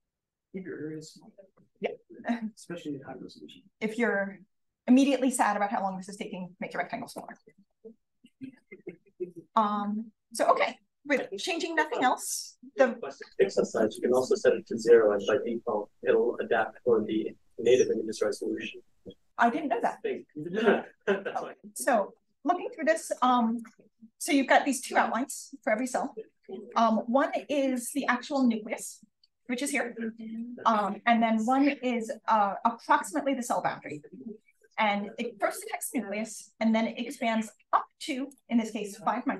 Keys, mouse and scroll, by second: 0.0-1.7 scroll up 3, 1.7-2.4 scroll down 2, 4.2-5.7 scroll up 2, 5.7-7.1 scroll up 1, 7.1 click, 7.1-8.9 scroll up 1, 8.9-9.9 scroll down 2, 9.9 click, 10.2-11.6 scroll down 1, 11.6-12.6 scroll up 2, 12.6-14.0 scroll up 1, 14.0-15.9 scroll up 1, 15.9-21.0 scroll up 1, 21.0-21.6 scroll up 1, 21.6 scroll down 2, 21.7-23.1 scroll up 2, 23.1-23.5 drag, 25.4 click, 38.0 click.